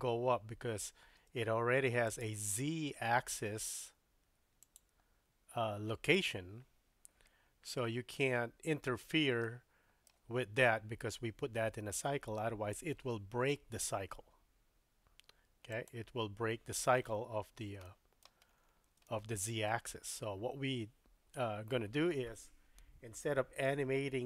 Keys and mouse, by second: 1.2 space, 2.2 click, 4.6 click, 6.1 click, 9.5-10.1 shift+middle drag, 15.7 click, 18.0 shift+middle click, 19.1 shift+middle click.